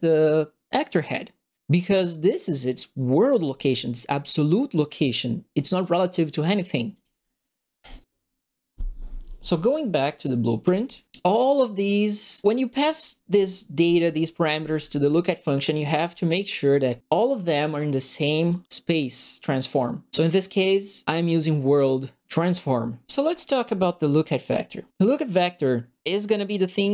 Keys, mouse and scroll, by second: 6.9 click, 7.8 click, 10.6 click, 12.7 click, 13.9-15.0 drag, 15.6 click, 18.3 click, 23.6 middle click.